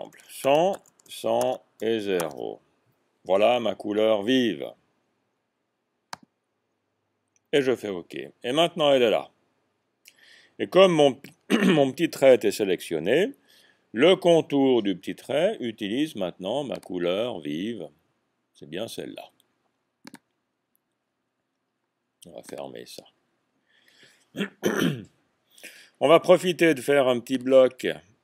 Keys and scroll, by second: 0.0-2.2 typing, 0.6 Tab.